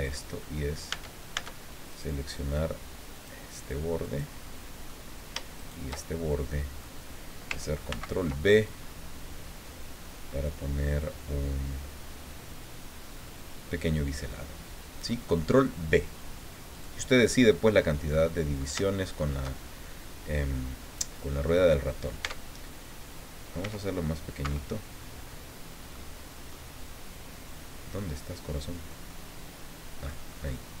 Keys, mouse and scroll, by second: 0.9 Tab, 1.9 right click, 3.1 click, 4.0 right click, 4.4 middle click, 5.6 shift+right click, 6.0 shift+middle click, 7.9 ctrl+b, 8.6-9.4 ctrl+scroll up 3, 16.7 click, 18.2 middle click, 18.8 shift+middle click, 19.6 shift+scroll down 2, 22.2 Tab, 23.6 s, 24.4 Escape, 24.9-25.5 scroll down 4, 25.9 click, 27.9-29.0 drag, 29.1-30.2 drag, 30.3-30.8 scroll up 2.